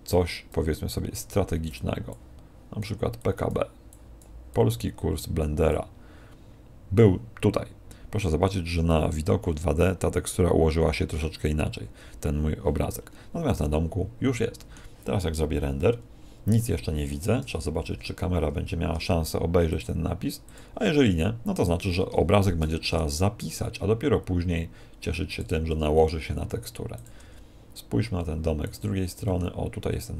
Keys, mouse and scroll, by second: 0.1 click, 7.7-8.1 scroll down 1, 8.5-9.3 scroll up 5, 9.3 middle click, 12.9-14.1 scroll down 8, 13.5 middle click, 16.8 F12, 16.8 Escape, 17.3 KP_0, 19.6 click, 21.5 right click, 22.3 shift+f, 25.4 click, 25.6 g, 27.1 click, 27.1 g, 28.7 click, 29.1 g.